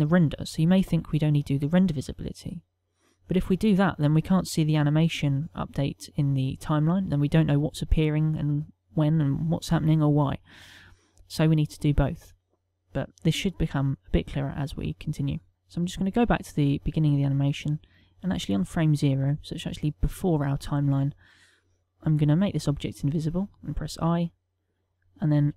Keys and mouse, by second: 5.1 middle click, 7.2 middle click, 10.6 middle click, 14.2 click, 15.9 click, 18.0 click, 21.8 ctrl+z, 22.3 click, 23.7 i, 24.7 click, 25.4 i.